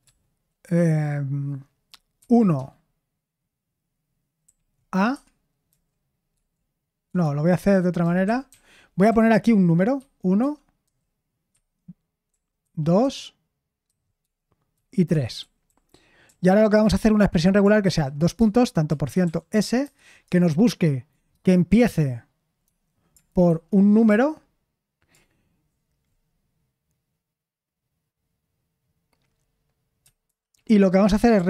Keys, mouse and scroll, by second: 2.1-2.5 typing, 4.4 a, 5.1 Escape, 5.6 j, 7.0 Escape, 7.2-12.3 typing, 10.4 Escape, 13.0 Escape, 13.8-16.2 typing, 18.6-19.8 typing, 23.4-24.0 typing, 30.2 /, 31.3-31.4 typing.